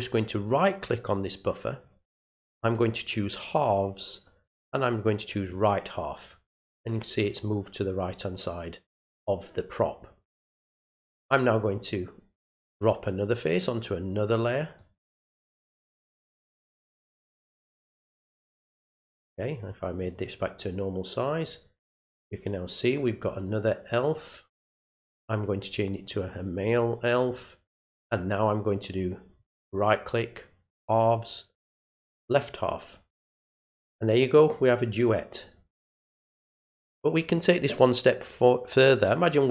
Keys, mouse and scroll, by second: 0.8 right click, 5.4 click, 12.6-14.8 drag, 15.8-18.3 drag, 20.0 click, 20.1 click, 23.2 click, 24.7 click, 26.0 click, 29.0 right click, 32.0 click.